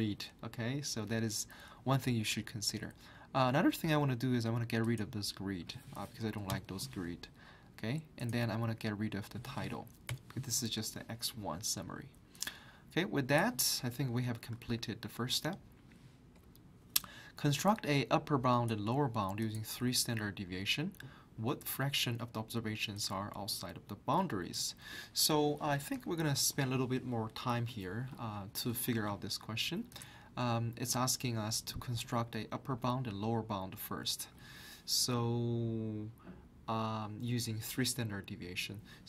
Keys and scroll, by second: 6.5 Delete, 14.6 alt+Tab.